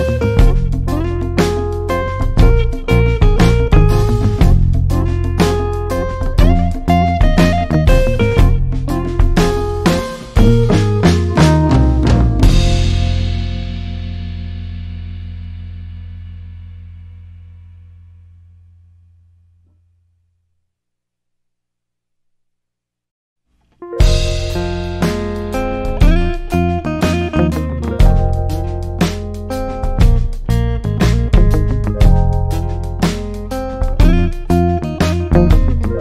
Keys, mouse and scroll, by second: 25.4 shift+Up, 34.8-36.0 shift+drag.